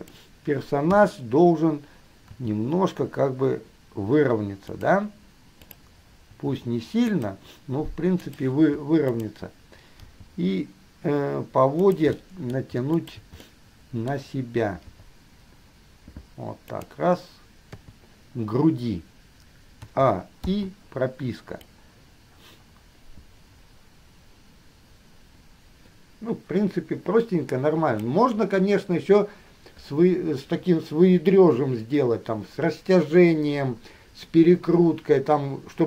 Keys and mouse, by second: 0.1 middle click, 1.1 KP_3, 2.5 r, 5.9 click, 6.5 r, 8.4 click, 10.1 g, 12.4 middle click, 13.1 shift+middle click, 13.6-15.0 middle drag, 15.0 g, 17.9 KP_3, 20.0 a, 20.6 i, 21.9-23.5 middle drag, 23.5-28.3 drag.